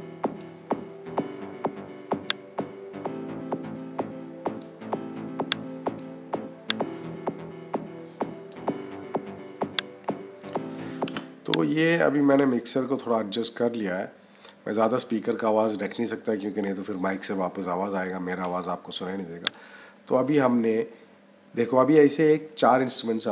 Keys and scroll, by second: 10.9 -.